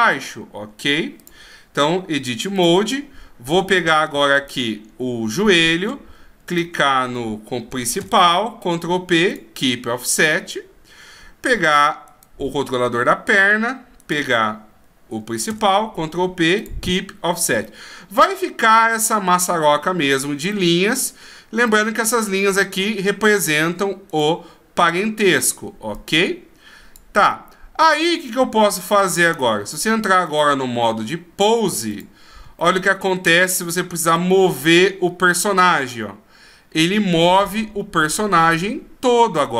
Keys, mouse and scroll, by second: 2.6 click, 3.8 right click, 4.4 right click, 6.5 shift+right click, 8.0 ctrl+p, 12.1 right click, 14.0 shift+right click, 15.5 ctrl+p, 17.7 middle click, 20.5 middle click, 21.7 middle click, 24.1 right click, 25.9 click, 27.3 middle click, 30.2 click, 32.0 click, 32.6 middle click, 34.1 click.